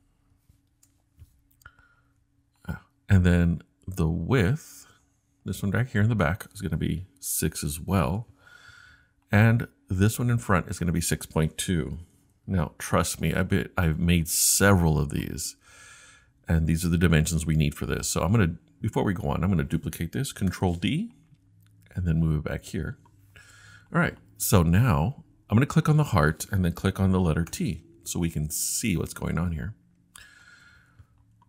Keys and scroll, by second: 0.3 6, 0.7 Return, 7.3 6, 8.0 Return, 11.6-12.9 typing, 14.7 typing, 20.5 super+d, 27.5 t.